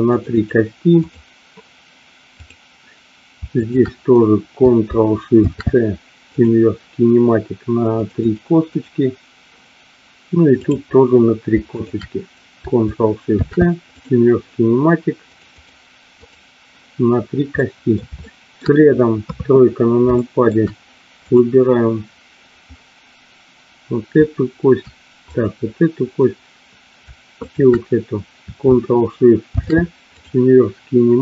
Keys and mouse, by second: 0.1 click, 2.3 click, 3.6 shift+click, 5.4 ctrl+shift+c, 8.1 click, 8.7 click, 11.7 shift+click, 15.3 click, 17.5 middle click, 18.2 shift+middle click, 19.2 KP_3, 20.2 shift+middle click, 21.2 click, 25.3 click, 27.5 shift+click, 29.7 ctrl+shift+c.